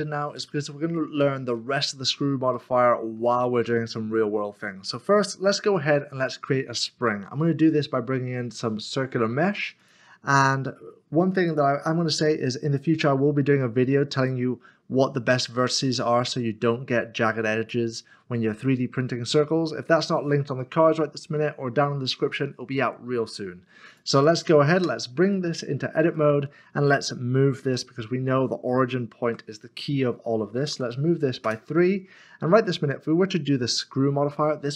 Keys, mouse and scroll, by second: 0.1 s, 0.8 s, 2.0-2.3 scroll up 1, 3.4 shift+middle click, 5.6 a, 9.8 a, 9.8 click, 23.9 click, 24.2 double click, 24.8 Tab, 25.3 middle click, 26.1 shift+middle click, 27.6 typing, 29.2 typing, 30.7 typing, 31.4 Return, 32.6 middle click.